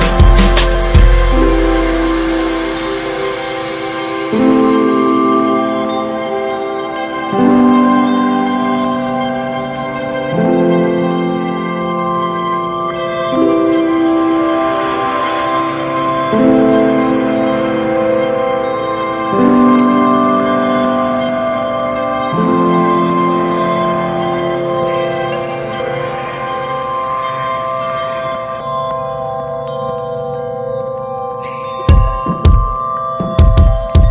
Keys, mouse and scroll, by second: 1.7 middle click, 2.1 ctrl+z, 2.7-3.7 drag, 3.7 middle drag, 3.9 alt+z, 4.2-5.4 shift+middle drag, 5.4-8.7 drag, 8.7-9.9 middle drag, 9.9 alt+z, 10.2-11.4 middle drag, 11.4-13.1 drag, 13.1-14.3 middle drag, 14.3 click, 14.5-15.1 scroll down 5, 14.7 shift+middle click, 15.1-15.6 middle drag, 15.6 scroll up 1, 15.8-16.2 middle drag, 16.2 ctrl+s, 16.4 click, 16.6-17.5 shift+middle drag, 17.5-18.3 scroll up 6, 17.7 shift+middle click, 18.3 ctrl+s, 18.5 scroll down 1, 18.7-20.0 middle drag, 19.3 click, 20.0 ctrl+s, 21.1-22.7 drag, 22.7 scroll down 5, 22.9-23.3 middle drag, 23.3 ctrl+s, 23.4 click, 23.7 middle click, 23.8 scroll up 4, 24.3 click, 24.6 Tab, 24.8 scroll up 4, 25.1-26.2 shift+middle drag, 26.2 click, 26.7 click, 27.7 alt+shift+click, 28.1 middle click, 28.5 shift+d, 29.4 middle click, 29.7 f, 30.0 scroll down 3, 31.1 3, 31.2 click, 31.8 l, 32.6 alt+middle click, 32.9 alt+middle click, 33.1 alt+z, 33.5 shift+middle click, 33.8 s.